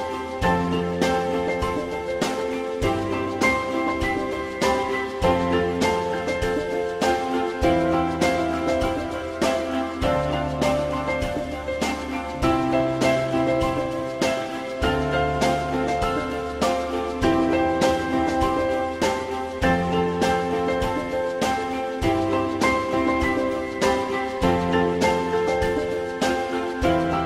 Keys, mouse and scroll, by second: 1.0 F4, 1.3 alt+middle click, 4.0 ctrl+z, 6.1 F4, 8.2 F4, 8.8 F4, 9.2 alt+middle click, 13.9 ctrl+click, 14.8 alt+middle click, 19.1 shift+click, 23.4 alt+middle click, 25.4 alt+middle click.